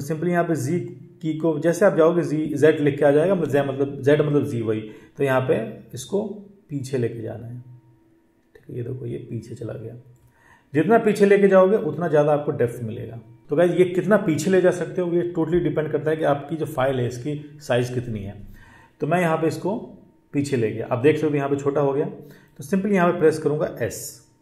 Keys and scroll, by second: 23.6 s.